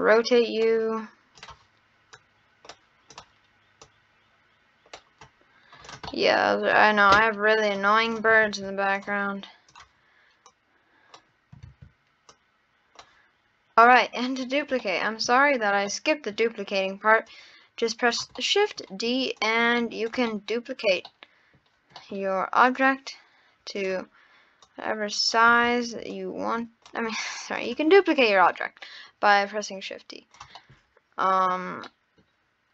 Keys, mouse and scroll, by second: 1.4 click, 3.1 drag, 3.8 click, 5.8 click, 6.1 scroll up 1, 6.1-6.9 middle drag, 6.9 scroll down 2, 7.6 click, 8.1 click, 8.5 shift+d, 9.7 click, 11.7 ctrl+z, 12.3 click, 13.8-14.8 drag, 14.8-15.1 middle drag, 15.1-15.9 scroll up 1, 15.9-16.4 middle drag, 16.4 scroll up 1, 17.3 click, 18.4-19.4 middle drag, 19.4 click, 20.3-22.2 middle drag, 22.2-22.7 scroll down 2, 22.7-24.7 drag, 26.1 click, 27.6-27.9 drag, 27.9 scroll up 1, 28.0-29.7 middle drag, 29.7 click, 30.6-32.7 middle drag.